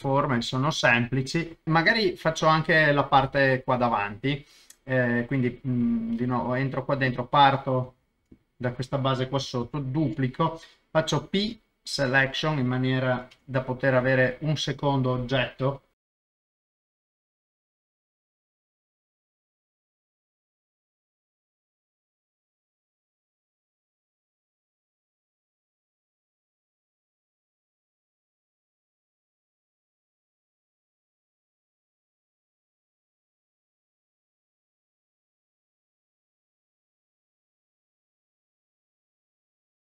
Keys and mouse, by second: 0.1 ctrl+middle click, 0.5 ctrl+middle click, 1.3 middle click, 1.6 ctrl+s, 2.2 shift+middle click, 2.5 shift+click, 3.2 shift+middle click, 5.2 click, 5.6 middle click, 6.3 Tab, 6.6 middle click, 8.2 3, 9.7 shift+d, 10.1 Escape, 11.1 p, 13.3 Tab, 16.0 middle click, 16.0-17.5 typing, 16.1 click, 16.2 ctrl+z, 16.4 Escape, 16.5 right click, 17.3 Tab, 18.2 click, 18.3 middle click, 18.4 middle click, 18.5 middle click, 18.7 middle click, 18.7-21.1 typing, 18.8 click, 18.8 middle click, 19.0 middle click, 19.2 click, 19.2 middle click, 19.5 click, 20.6 middle click, 20.8 click, 21.0 click, 21.4 click, 21.6 click, 21.8 middle click, 22.0 middle click, 22.2 shift+click, 22.3 middle click, 22.3-25.8 typing, 22.9 middle click, 23.5 click, 23.5 middle click, 23.6 shift+middle click, 23.8 click, 24.0 ctrl+b, 24.5 middle click, 24.7 middle click, 24.8 click, 25.3 middle click, 25.8 click, 25.9 middle click, 26.0 click, 26.0 ctrl+alt+shift+g, 26.6 middle click, 26.7 click, 27.2 middle click, 27.2-39.9 typing, 27.3 click, 27.7 middle click, 28.6 click, 28.7 middle click, 29.1 click, 29.2 middle click, 29.9 shift+click, 30.1 middle click, 30.3 middle click, 30.5 middle click, 30.6 middle click, 30.7 middle click, 32.6 middle click, 32.7 click, 32.9 middle click, 33.1 middle click, 33.3 middle click, 33.4 click, 33.4 middle click, 33.5 shift+middle click, 33.6 middle click, 33.8 middle click, 34.1 middle click, 34.8 middle click, 34.9 click, 35.1 middle click, 35.4 middle click, 35.6 middle click, 35.8 middle click, 36.0 shift+click, 36.2 middle click, 36.5 shift+click, 36.9 shift+click, 37.0 middle click, 37.2 shift+click, 37.3 shift+click, 37.5 shift+click, 37.8 middle click, 38.1 middle click, 38.1 ctrl+z, 38.8 middle click, 38.9 click, 39.3 alt+shift+click, 39.7 middle click, 39.8 Tab.